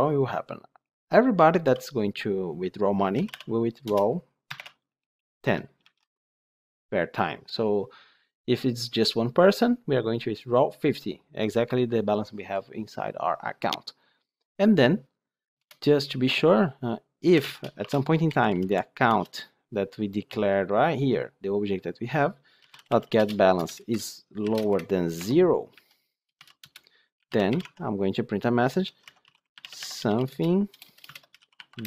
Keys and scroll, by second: 3.7 Return, 19.0 Return, 23.5 Return, 27.5 Tab.